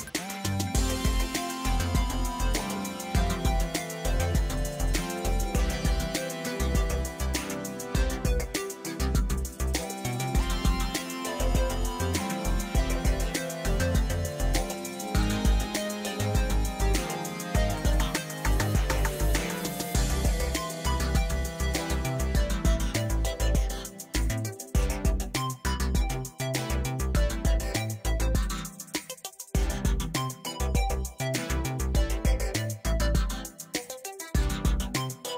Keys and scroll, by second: 3.5 space, 10.1 space, 16.1 space, 16.6 alt+space, 18.4 ctrl+u, 26.7 ctrl+l, 31.4 ctrl+space, 31.7 ctrl+space, 34.6 space.